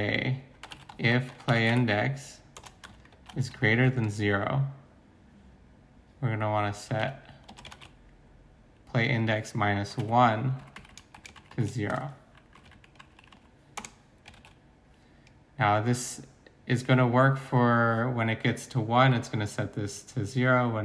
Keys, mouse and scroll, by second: 0.6-1.8 typing, 2.6 Return, 2.9-4.0 typing, 6.6-8.5 typing, 9.9-12.8 typing, 12.7 ctrl+Right, 13.0 ctrl+Right, 13.8 Return, 14.4 ctrl+s.